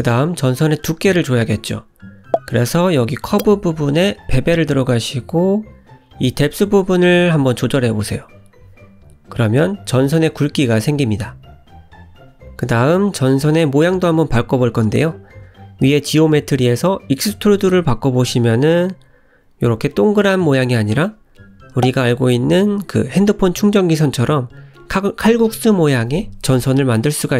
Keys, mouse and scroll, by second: 1.4 scroll down 2, 9.7 shift+click, 10.2 scroll up 1, 13.0-13.5 scroll up 1, 13.5 shift+click, 16.2 middle click, 17.5 shift+click, 21.4 click.